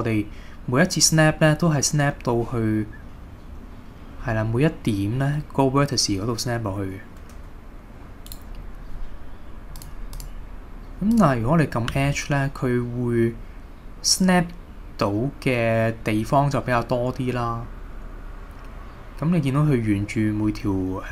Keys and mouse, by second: 8.3-9.8 right drag, 9.8 click, 10.2-11.4 drag, 11.9 g.